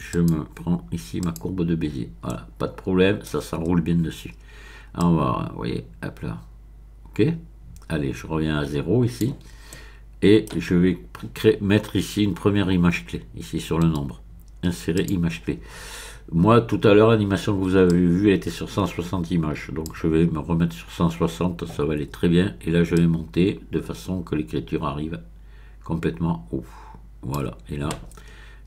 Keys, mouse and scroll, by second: 0.1 click, 1.2 click, 2.3-3.2 scroll up 1, 3.2-4.1 scroll up 1, 5.0-9.3 drag, 9.7-11.2 middle drag, 14.9 click, 17.9-20.2 drag, 22.9-27.7 drag.